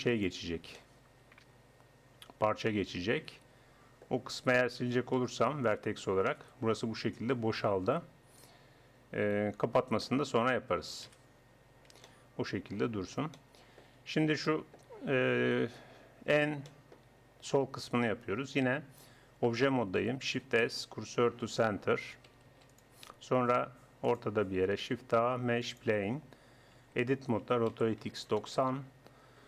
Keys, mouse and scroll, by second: 0.8-2.1 middle drag, 2.7-6.3 middle drag, 5.2 x, 8.2-9.8 middle drag, 10.2 middle click, 11.1 KP_1, 11.2 middle click, 11.4 Tab, 16.4-18.5 middle drag, 20.3 shift+s, 22.5 ctrl+s, 24.0 click, 24.8 shift+a, 26.8 Tab, 27.4 r.